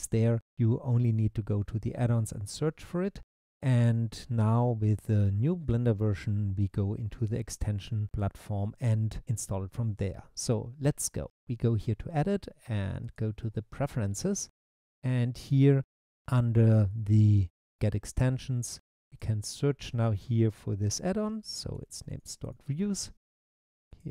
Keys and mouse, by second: 12.1-13.3 drag.